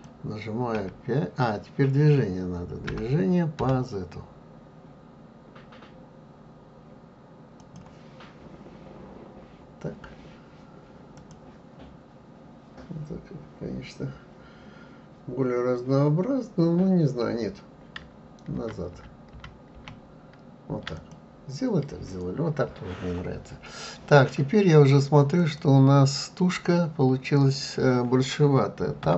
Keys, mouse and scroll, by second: 11.1 click, 18.5 ctrl+z, 18.9 ctrl+z, 19.7 ctrl+z, 20.9 click, 25.4 click, 29.0 Tab.